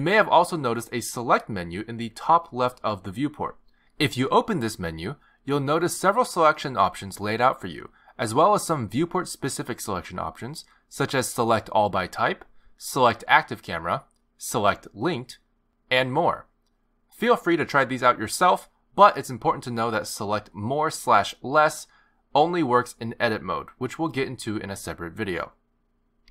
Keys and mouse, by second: 1.9 click, 5.6 click, 22.8 click.